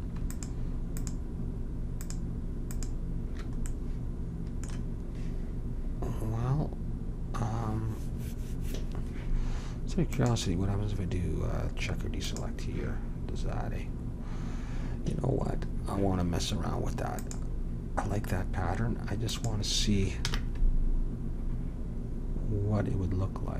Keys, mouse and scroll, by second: 0.3-4.5 drag, 17.1-19.0 drag, 20.2 ctrl+b.